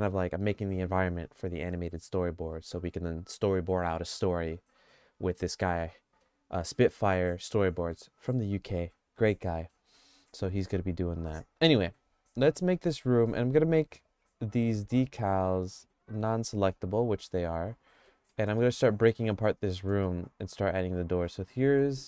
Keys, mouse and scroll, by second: 16.4 click, 16.7 click, 18.0 Tab, 18.3 middle click, 18.6 middle click, 19.2 middle click, 20.0-21.6 middle drag.